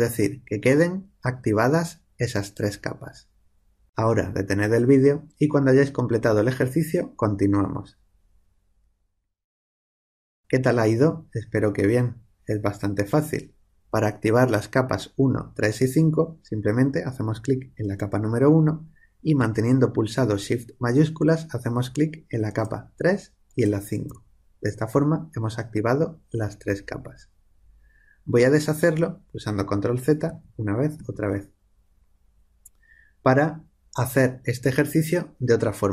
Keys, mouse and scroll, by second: 17.7 click, 22.4-25.1 drag, 29.5 ctrl+z, 30.2 ctrl+z.